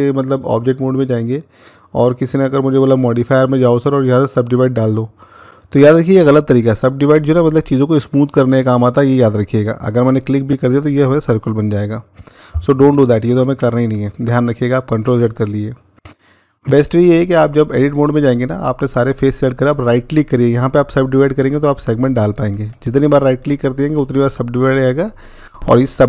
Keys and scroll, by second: 13.4 ctrl+z.